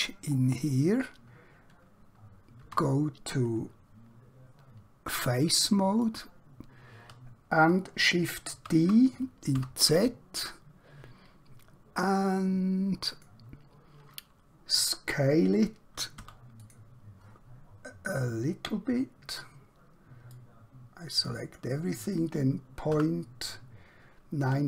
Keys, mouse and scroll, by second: 0.4 scroll up 1, 2.7 3, 5.6 alt+Num_Lock, 6.0 alt+click, 8.6 shift+d, 9.6 z, 13.1 click, 16.2 s, 16.6 click, 20.3 click, 22.8 typing, 24.4 typing.